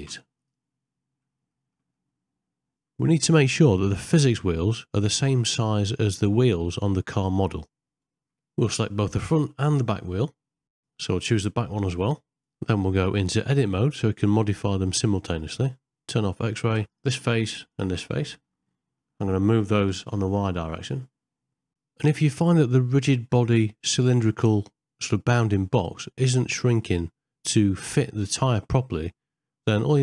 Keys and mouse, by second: 0.1 x, 1.6 middle click, 2.0-3.1 middle drag, 3.5 ctrl+middle click, 4.4 KP_1, 5.0 z, 7.2-8.2 ctrl+middle drag, 10.8 Tab, 14.3 z, 18.3 ctrl+middle click, 18.7 middle click, 25.4 middle click, 26.1 shift+middle click, 26.8 middle click, 29.2 shift+click.